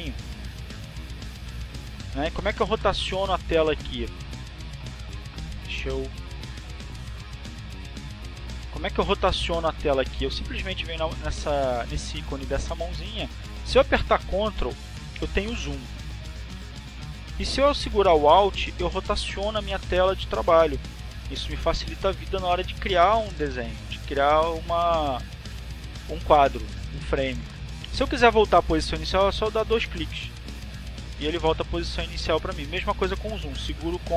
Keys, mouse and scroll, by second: 1.3 click, 4.8 click, 6.6 click, 8.3 click, 12.0 click, 13.3 click, 14.9-16.6 drag, 17.4 click, 20.8-24.3 ctrl+drag, 24.8-34.1 alt+drag.